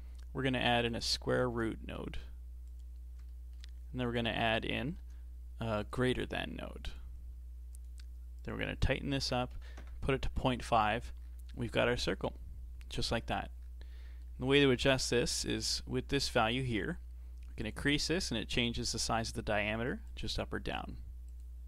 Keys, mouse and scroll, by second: 0.8-3.3 drag, 3.3-4.2 shift+middle drag, 4.2 click, 4.5 click, 5.0 shift+d, 6.9-11.2 drag, 11.2-11.7 scroll down 4, 11.7-13.6 middle drag, 13.6-14.0 scroll up 1, 14.0-17.0 middle drag, 17.6 click, 18.9 click, 20.1 click, 21.3 click.